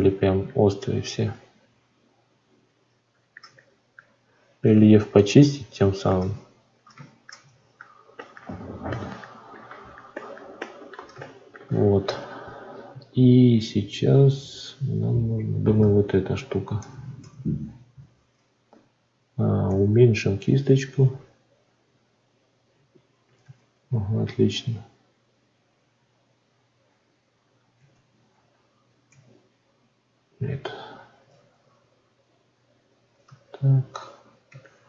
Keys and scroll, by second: 19.6 f, 23.4 ctrl+z, 27.7 ctrl+z.